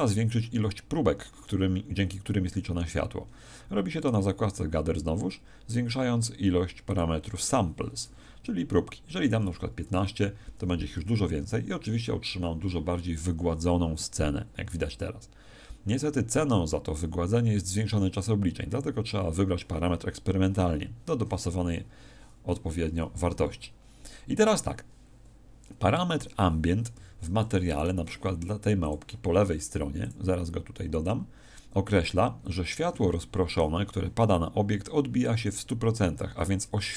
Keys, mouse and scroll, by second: 26.9 Escape, 27.7 right click, 28.8 click, 30.0 click.